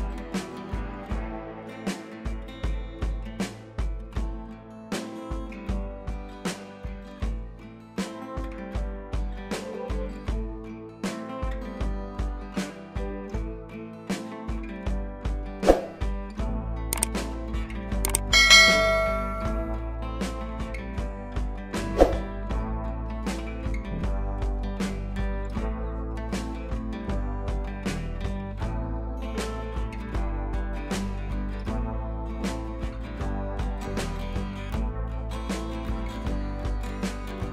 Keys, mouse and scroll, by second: 2.2 shift+u, 4.8-6.8 drag, 13.8-21.4 drag, 22.5 t, 23.2 click, 24.1-26.8 typing, 27.9 ctrl+a, 28.4 Caps_Lock, 28.8-30.2 drag, 36.1 click.